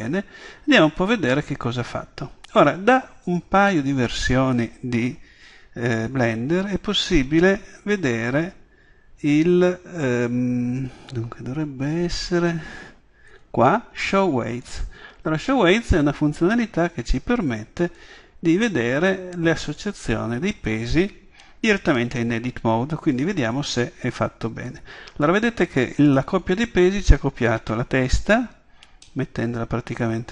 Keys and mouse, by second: 0.5 middle click, 0.8-3.3 middle drag, 3.3-5.3 drag, 14.7-16.5 drag, 17.9-19.7 drag, 21.6-24.7 middle drag, 29.3-30.3 middle drag.